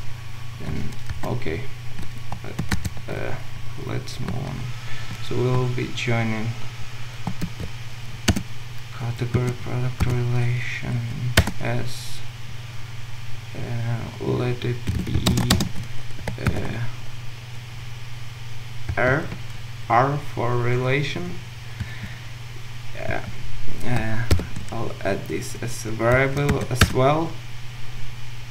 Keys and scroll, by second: 1.1 ctrl+alt+Left, 7.5 ctrl+v, 15.4 Return, 15.6 ctrl+shift+space.